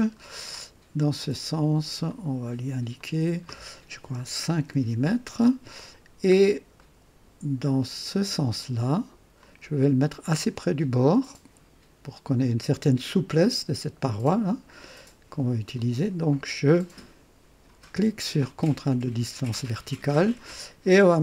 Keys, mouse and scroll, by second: 0.1-0.4 scroll up 1, 1.7 click, 2.9 click, 4.1 KP_5, 4.4 Return, 6.3 scroll down 1, 6.7-7.4 right drag, 9.3-11.2 drag, 15.7 click, 18.8 click, 21.1 KP_3.